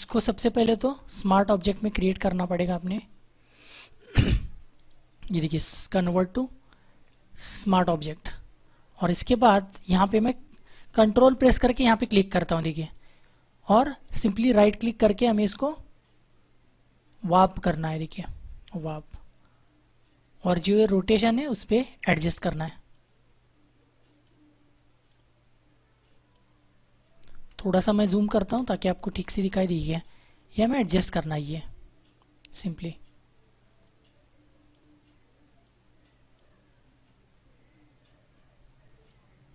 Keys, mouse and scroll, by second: 0.3 ctrl+z, 1.9 click, 4.7 right click, 7.6 click, 12.7 ctrl+click, 14.0 right click, 18.7 click, 27.9 ctrl+=, 28.4 space, 28.7 click, 28.9 space, 30.4 click, 39.0 click.